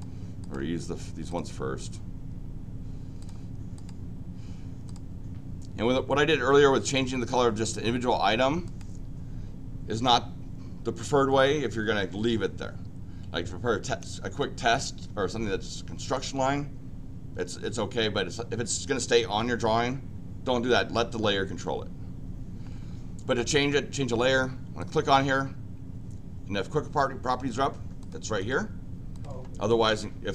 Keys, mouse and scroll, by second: 0.4 click, 1.2 click, 3.2 click, 3.7 click, 4.8 click, 6.8 click, 6.9 click, 8.6 click, 24.8 click, 28.0 click, 28.4 click, 29.1 click, 29.8 click.